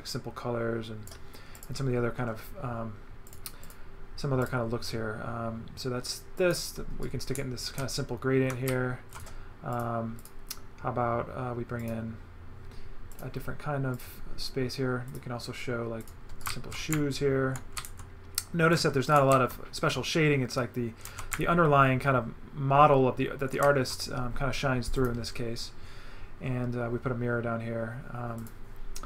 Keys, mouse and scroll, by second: 1.6 click, 3.3 click, 4.4 click, 6.4 click, 7.0 right click, 8.5 right click, 9.1 right click, 9.7 click, 11.8 click, 13.1 click, 13.9 click, 15.1 click, 16.0 click, 16.4 right click, 19.1 right click, 25.0 click, 28.4 click.